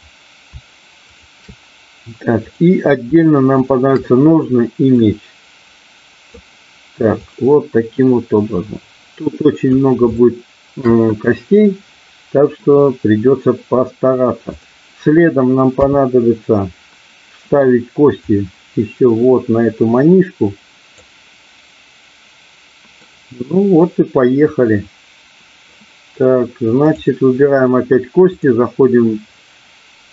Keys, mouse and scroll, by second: 1.1 shift+click, 2.3 click, 3.5 shift+click, 5.0-6.3 drag, 8.6-9.7 drag, 10.1 shift+middle click, 12.6-13.7 middle drag, 14.5 click, 15.7 KP_3, 18.1-21.0 drag, 23.1-25.7 middle drag, 26.8 click, 28.2-30.1 drag.